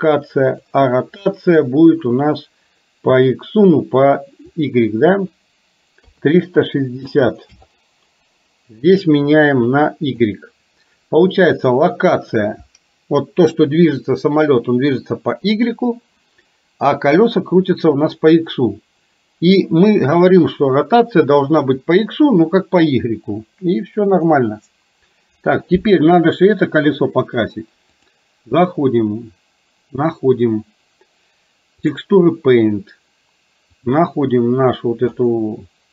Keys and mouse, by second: 5.2-7.8 drag, 8.9-10.3 drag, 28.0-32.1 drag.